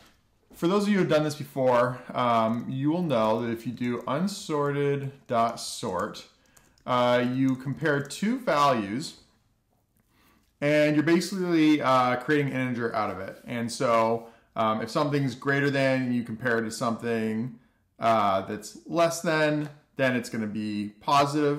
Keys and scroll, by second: 0.0 Tab, 5.5-11.3 typing.